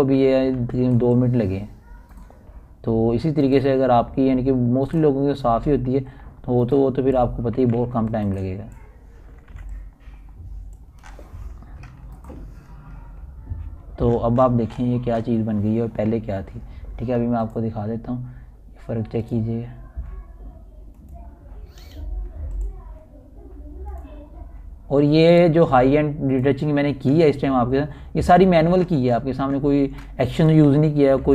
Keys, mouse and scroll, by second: 0.0-1.6 typing, 2.0 click, 2.5 scroll down 1, 2.8-3.5 typing, 3.8-10.1 drag, 5.5-6.2 typing, 10.1 scroll down 2, 10.3-12.8 typing, 10.7 click, 11.8 scroll down 1, 12.3-13.7 drag, 13.7 scroll up 1, 13.8 scroll down 1, 14.6 ctrl+scroll down 1, 14.7-15.0 typing, 15.3 ctrl+alt+scroll down 1, 16.1-17.1 typing, 16.5 ctrl+alt+scroll up 1, 16.9 scroll, 17.1 ctrl+alt+scroll up 1, 17.3 scroll, 17.9 ctrl+alt+scroll up 1, 20.1 click, 23.6-27.9 typing, 27.4 click, 30.5 alt+scroll down 1.